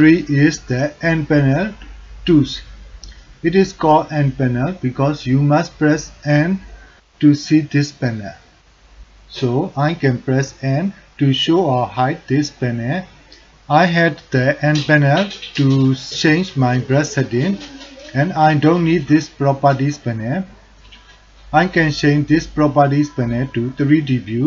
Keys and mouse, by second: 2.0 n, 3.8 click, 8.0 click, 9.5-13.5 typing, 22.6-24.4 drag.